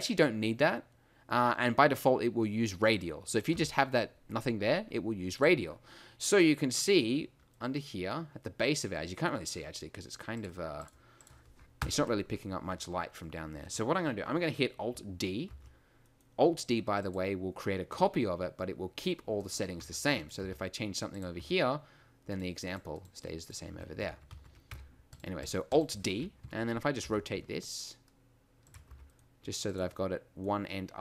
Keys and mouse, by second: 3.5 x, 6.7 middle click, 6.8 a, 11.8 KP_1, 15.5 alt+d, 19.4-19.8 right drag, 19.8 Tab, 20.4 g, 21.4 Tab, 23.7 Tab, 24.1 ctrl+z, 24.3 ctrl+z, 24.7 Tab, 26.4 KP_3, 27.1 r, 28.9 g.